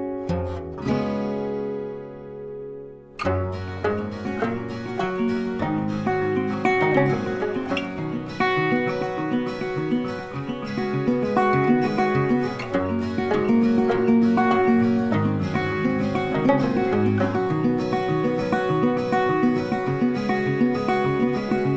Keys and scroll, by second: 1.1-2.0 typing, 5.1 space, 11.6 z, 12.6 space, 20.2 z, 20.8 space, 21.3 z.